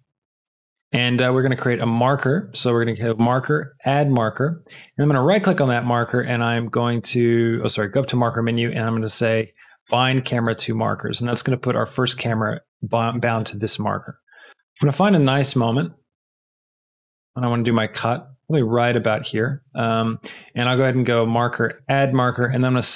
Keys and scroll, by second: 12.3 space, 17.4 space.